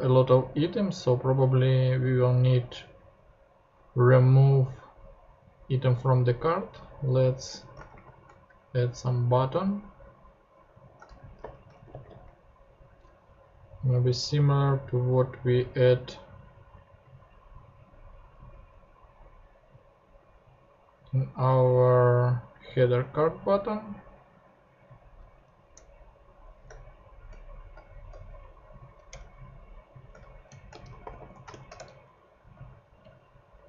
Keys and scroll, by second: 7.9 shift+super+f, 10.8-12.4 typing, 18.3 super+c, 25.7 Return, 26.7 shift+Return, 29.1 shift+Return, 30.1 shift+Return, 30.2-31.7 typing, 31.8 shift+Return, 32.5 shift+super+Return.